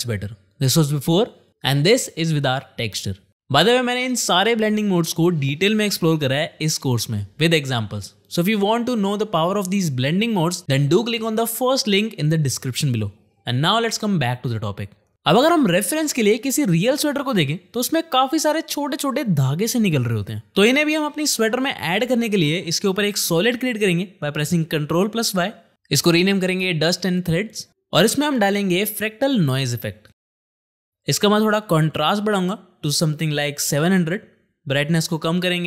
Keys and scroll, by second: 3.3 shift+/, 24.7 ctrl+y, 28.0 Return, 28.5 ctrl+space, 28.8-29.6 typing, 29.9 Down, 33.3 KP_7, 33.3 KP_0, 33.9 Return.